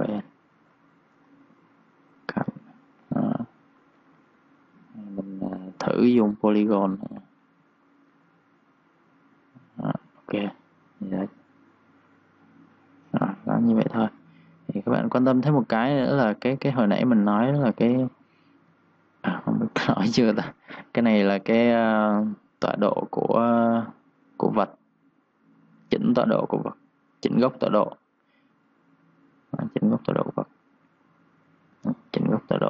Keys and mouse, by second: 0.6 ctrl+z, 1.1 Return, 2.2 click, 4.3 click, 4.8-8.6 typing, 6.0 click, 6.3 click, 6.7 click, 7.6 click, 8.8 click, 13.7-14.3 typing, 13.9 click, 16.2 click, 16.8-19.6 typing, 17.1 click, 18.0 click, 18.6 click, 19.2 click, 23.5-24.9 typing, 23.7 click, 25.7 click, 28.4-29.4 typing, 28.6 click, 31.8 click.